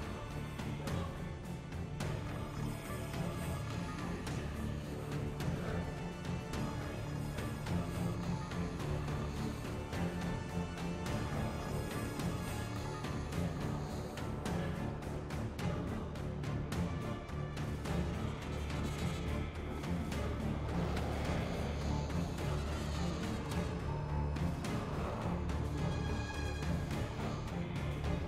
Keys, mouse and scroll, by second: 18.0 click, 19.6 click.